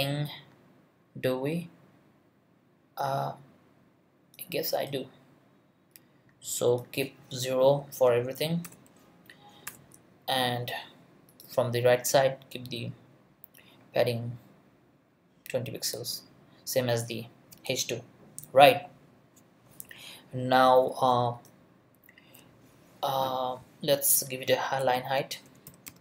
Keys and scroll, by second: 7.6 0, 8.4 Right, 8.6 BackSpace, 8.7 0, 9.7 BackSpace, 24.8 Return, 25.4 l, 25.9 n.